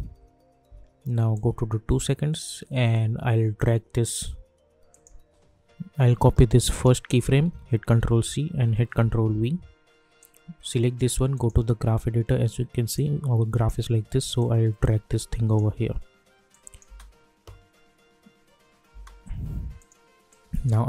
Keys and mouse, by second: 1.3-4.0 drag, 7.9 ctrl+c, 8.9 ctrl+v, 10.2-16.5 drag, 16.8 space, 18.9 space, 19.8 click.